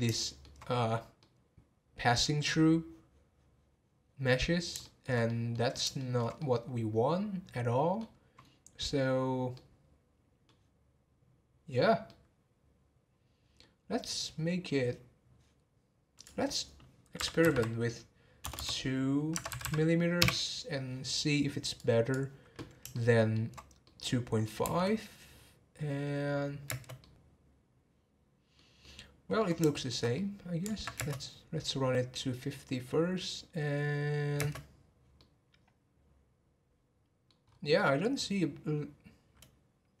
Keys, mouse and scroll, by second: 4.8-5.5 shift+middle drag, 5.5 scroll down 1, 6.0-9.5 shift+middle drag, 12.1-13.7 middle drag, 13.7-14.7 scroll down 1, 14.7-15.4 scroll down 1, 15.4-16.1 scroll down 1, 16.1-17.5 drag, 17.5 m, 18.6 BackSpace, 19.6 m, 21.8-22.9 drag, 22.9-24.6 shift+middle drag, 24.6 space, 26.7 space, 27.0-30.9 middle drag, 30.9 space, 34.4 space, 35.2-37.4 middle drag, 37.4-37.7 scroll up 1, 37.7-40.0 middle drag.